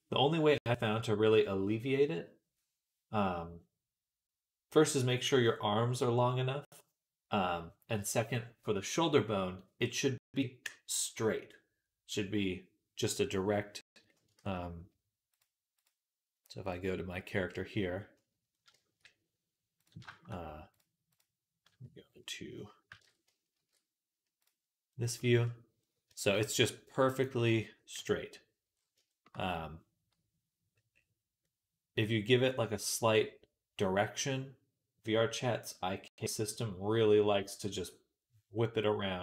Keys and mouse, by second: 13.8 middle click, 14.0-39.2 ctrl+middle drag, 14.3 ctrl+s, 15.2-19.9 drag, 22.9 ctrl+Tab, 23.4 shift+m, 27.8 KP_1.